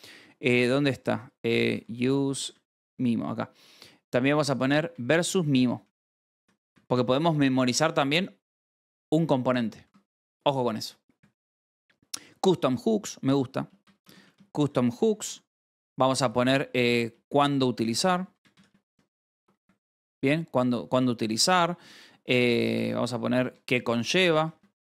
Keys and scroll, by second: 0.0 j, 1.4-2.2 typing, 2.8 Return, 4.0-9.8 typing, 7.1 ctrl+j, 8.0 Escape, 11.1 k, 13.1-17.3 typing, 16.6 Tab, 18.3-20.1 typing, 21.7 space, 22.0 Return, 22.9-24.9 typing.